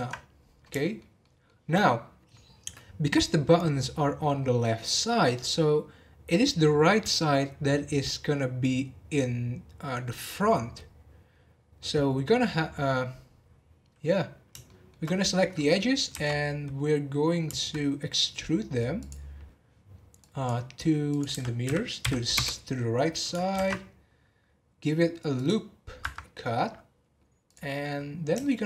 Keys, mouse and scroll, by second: 0.4-0.8 scroll down 1, 0.8-4.4 shift+middle drag, 14.6-16.1 shift+middle drag, 16.1 e, 21.1-23.5 drag, 23.5 ctrl+r, 27.4 click, 27.9-28.6 scroll up 3, 28.4 shift+middle click.